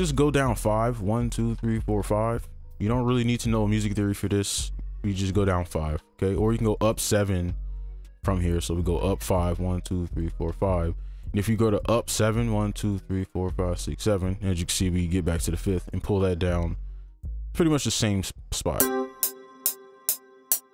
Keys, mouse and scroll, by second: 1.0 shift+Down, 1.3 shift+Down, 1.5-2.0 shift+Down, 5.5 right click, 7.2 ctrl+click, 9.6 shift+Up, 9.8 shift+Up, 10.1 shift+Up, 10.3 shift+Up, 10.6 shift+Up, 12.4-14.0 shift+Up, 16.7-18.8 scroll down 1, 19.2 right click.